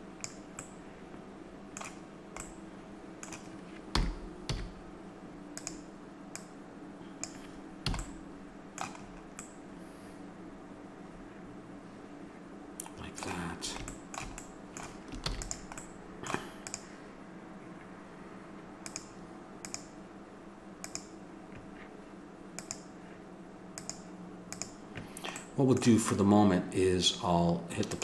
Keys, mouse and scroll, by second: 0.6 middle click, 3.9 r, 4.5-6.3 middle drag, 6.3-7.5 drag, 7.5 click, 7.9 a, 13.9-15.2 middle drag, 15.2 ctrl+s, 16.8-18.3 drag, 18.9-25.4 drag, 25.4-27.2 middle drag, 27.9-28.0 drag.